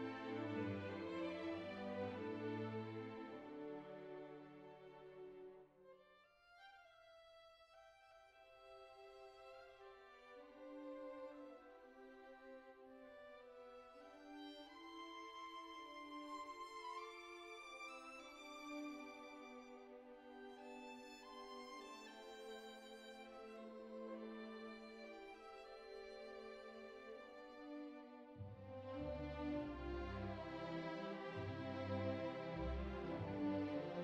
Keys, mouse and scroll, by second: 1.2-3.9 middle drag, 6.1-8.1 middle drag, 8.5-10.4 middle drag, 11.2-12.8 middle drag, 13.3-14.6 middle drag, 16.1 middle click, 16.4 alt+z, 17.0 alt+z, 17.3 g, 18.8 middle click, 19.2 alt+z, 19.5 shift+middle click, 20.9 r, 23.1 shift+middle click, 23.6 click, 24.1 middle click, 25.2 click, 25.4 shift+middle click, 25.9 alt+z, 26.2 g, 27.6 click, 28.0 click, 28.4 r, 28.6 x, 29.9 click, 30.4 middle click, 30.8 g, 31.7 middle click, 32.3 alt+z, 33.3 alt+z, 33.7 g.